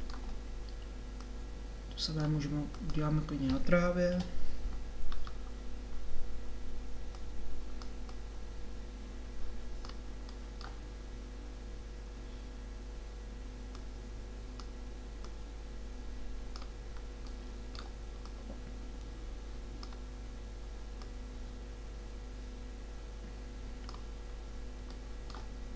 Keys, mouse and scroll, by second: 4.2 KP_7, 9.9 middle click, 13.8-17.1 drag, 18.3-20.0 drag, 20.0-21.1 middle drag, 21.1-24.0 drag.